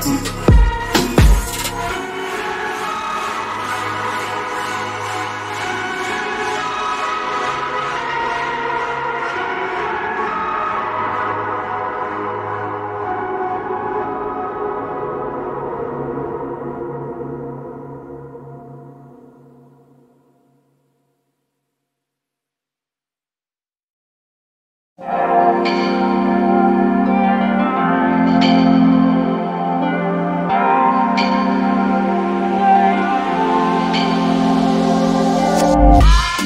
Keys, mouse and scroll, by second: 5.9 click, 6.8 right click, 8.6 click, 8.8 double click, 12.4 ctrl+click, 14.0 double click, 20.5 click, 23.7 click, 24.9 double click, 26.2 click, 28.3 right click, 28.7 click, 31.9 double click, 34.5 alt+click, 34.9-35.3 scroll down 1, 35.3 click.